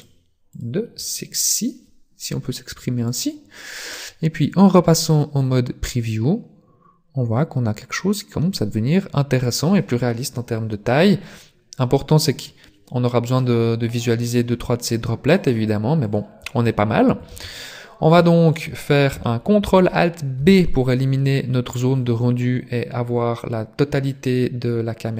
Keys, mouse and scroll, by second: 0.0 click, 15.2 click, 17.3 shift+space, 17.8-18.2 scroll down 1, 18.2 shift+middle click, 20.4 ctrl+alt+b.